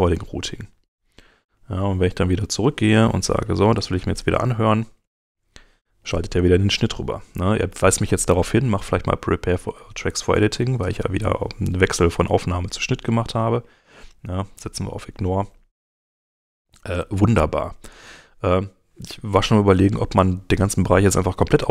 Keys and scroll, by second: 5.0 space.